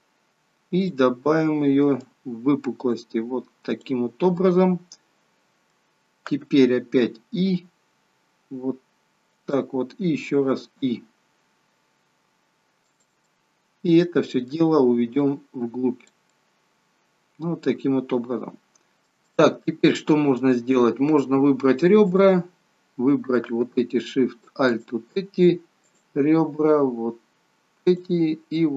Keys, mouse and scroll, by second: 0.7 click, 2.0 click, 4.3 middle click, 7.1 i, 13.2 middle click, 15.2 click, 16.4 middle click, 18.9 shift+middle click, 18.9 scroll up 4, 19.2 middle click, 22.0 click, 24.7 alt+shift+click, 25.7 alt+shift+click, 27.8 alt+shift+click.